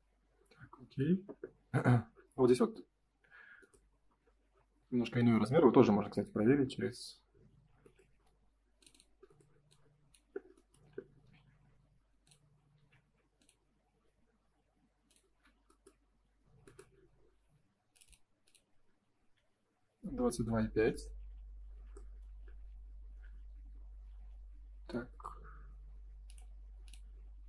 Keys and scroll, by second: 8.0 Escape, 12.7 Escape, 15.9 space, 16.0 Escape, 23.2 Escape.